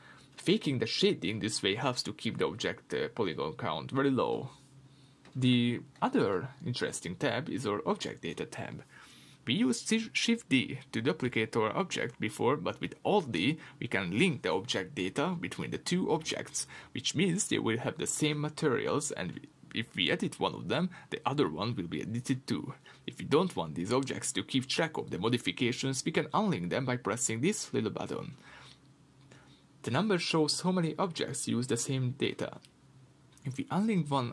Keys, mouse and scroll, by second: 0.4-1.2 scroll up 2, 1.2-1.7 scroll down 2, 7.7-9.8 scroll up 1, 9.8 shift+d, 11.3 click, 15.0 x, 15.4 click, 17.1 alt+d, 17.9 click, 18.2 Tab, 18.7-23.4 shift+middle drag, 22.2 ctrl+r, 23.4 click, 25.0 Tab, 25.7 alt+d, 27.0 click.